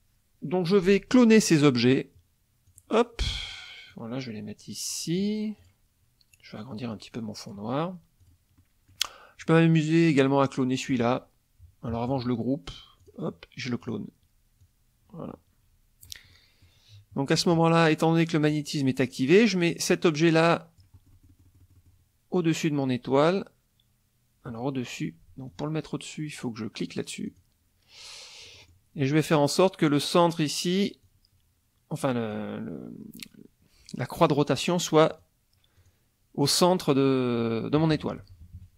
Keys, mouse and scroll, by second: 2.6 click, 3.2 click, 3.9-5.4 drag, 5.6 click, 6.9-7.7 drag, 8.2 click, 8.6 middle click, 13.0 click, 13.8 click, 14.6-16.2 drag, 16.3 ctrl+middle click, 17.3 click, 18.5-21.0 drag, 21.0-22.1 middle drag, 23.1 click, 27.2 click, 28.4 click, 31.0-32.5 drag, 35.1 click, 35.7 click, 37.8 KP_Subtract.